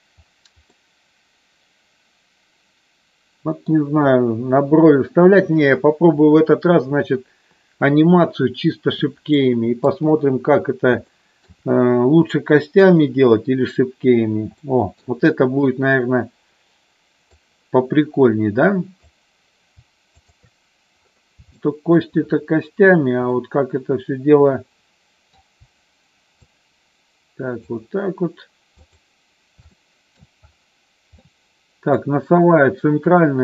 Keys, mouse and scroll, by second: 0.8-3.6 middle drag, 9.4 middle click, 10.2 KP_1, 11.2 shift+middle click, 14.6 shift+middle click, 17.4-19.0 drag, 20.2 shift+click, 21.7 shift+middle click, 23.3-25.4 middle drag, 26.5-27.8 shift+drag, 28.9 shift+click, 29.8 middle click, 31.3 middle click.